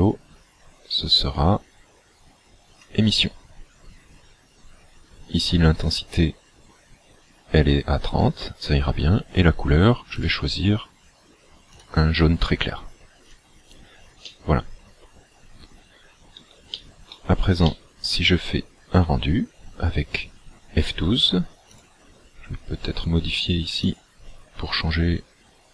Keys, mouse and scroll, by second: 10.2 click, 14.3 middle click, 16.7 shift+middle click, 17.7 middle click, 18.7 scroll up 2, 21.8 click, 23.9 click.